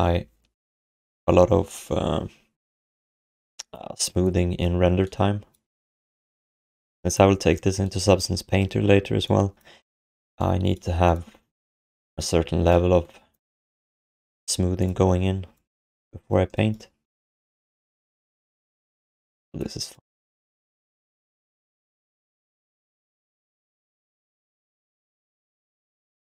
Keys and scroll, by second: 20.1-21.6 typing, 22.8 ctrl+shift+d, 24.0 ctrl+s.